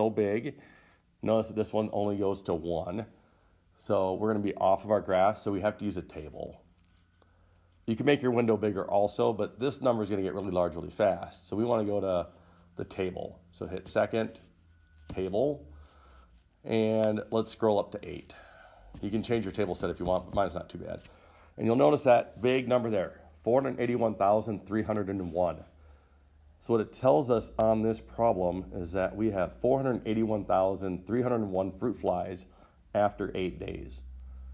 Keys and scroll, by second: 19.2 Up, 19.6 Up, 20.4 Up, 20.5 Up.